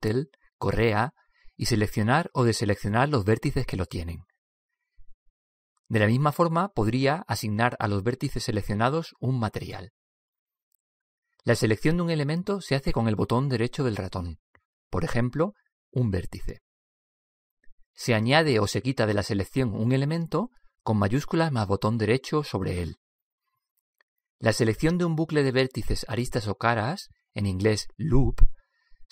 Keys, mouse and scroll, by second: 0.5-2.4 drag, 3.3-6.6 drag, 8.0-9.8 drag, 11.1-14.6 middle drag, 14.6-16.3 right drag, 17.1-20.0 right drag, 23.2-26.3 right drag, 29.0 middle click.